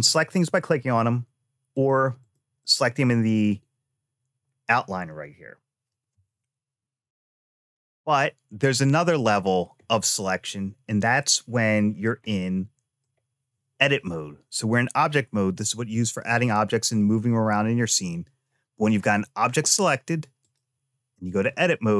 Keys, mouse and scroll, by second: 0.3 click, 1.5 click, 2.0 click, 2.4 click, 9.0-10.6 scroll up 5, 12.1 shift+middle click, 18.6 click, 20.2-21.3 drag.